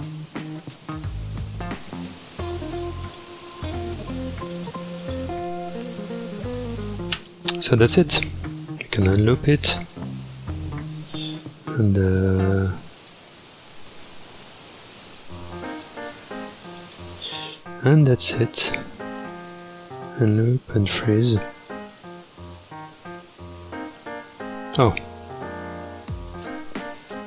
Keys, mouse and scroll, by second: 7.2 space, 7.9-9.1 scroll down 2, 9.1 click, 9.8 space, 13.1-14.9 drag, 14.9-15.4 scroll up 2, 15.7-18.5 drag, 18.5-20.0 scroll up 2, 20.0-23.3 drag, 23.3 space, 24.0 space, 26.3-27.2 drag.